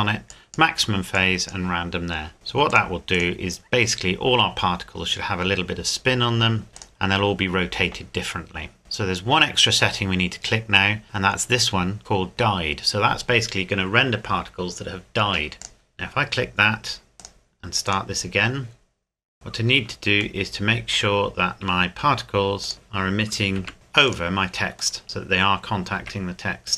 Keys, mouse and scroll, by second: 6.7 click, 7.7 click, 8.8-9.9 scroll down 1, 15.6 click, 19.3 scroll up 1, 20.1 scroll down 1, 20.4 shift+middle click, 22.6 click, 23.6 g, 24.1 click, 25.0 middle click, 25.9 scroll up 1, 25.9 z.